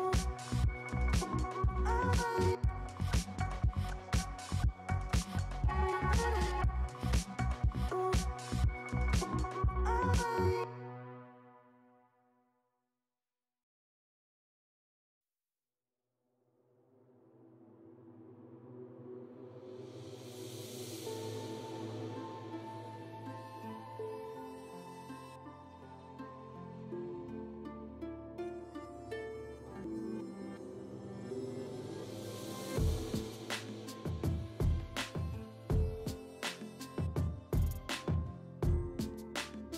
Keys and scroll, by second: 21.3 F9.